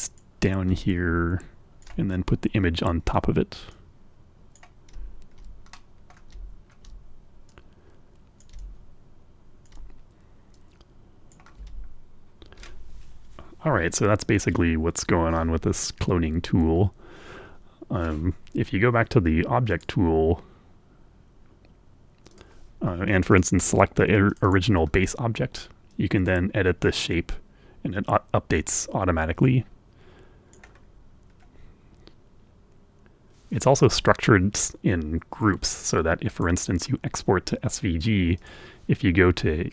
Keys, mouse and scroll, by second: 0.7-1.9 ctrl+drag, 2.0-2.8 scroll up 4, 3.6-4.6 drag, 4.9-5.3 ctrl+scroll down 2, 5.6 scroll up 2, 5.6 middle click, 6.0 scroll down 2, 6.4 ctrl+scroll up 2, 7.3-9.7 drag, 10.4 click, 11.7-12.0 ctrl+scroll up 1, 15.6-16.1 scroll up 1, 17.1-17.5 scroll up 1, 19.6 click, 22.1 click, 23.1 right click, 24.0 right click, 25.7-30.6 right drag, 30.7-31.1 scroll down 1, 31.2 scroll up 1, 36.1 right click, 38.1 right click.